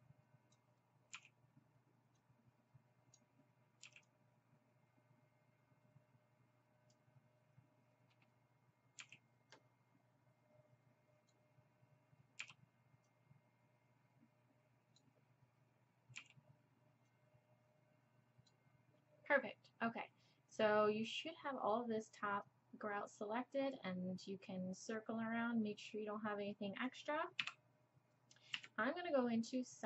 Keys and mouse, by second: 1.1 b, 3.8 b, 9.0 b, 12.4 b, 16.2 b, 22.5-24.8 middle drag, 25.8 middle click, 27.4 KP_7, 28.5 KP_3.